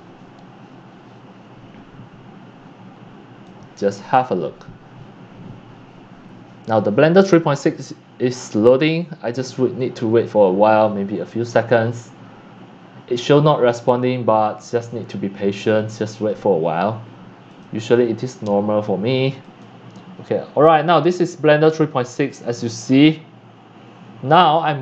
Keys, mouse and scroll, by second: 0.0 click, 2.6 click, 16.6 click, 16.9-19.6 drag, 20.7 middle drag, 21.1 click.